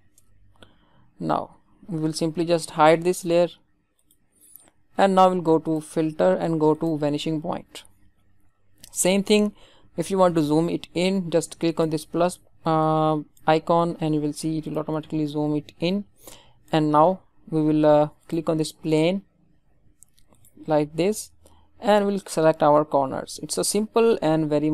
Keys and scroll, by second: 0.1 Return.